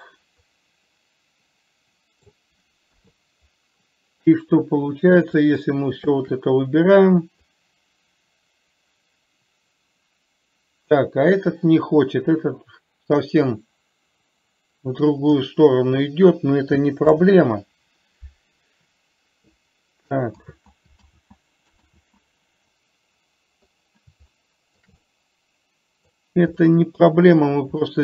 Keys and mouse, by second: 0.2-2.7 middle drag, 3.3 KP_3, 7.7-15.8 drag, 17.4 ctrl+z, 20.7 ctrl+z, 21.4 ctrl+z, 22.3 ctrl+z, 24.8 middle click, 25.4-26.4 middle drag, 26.9 middle click.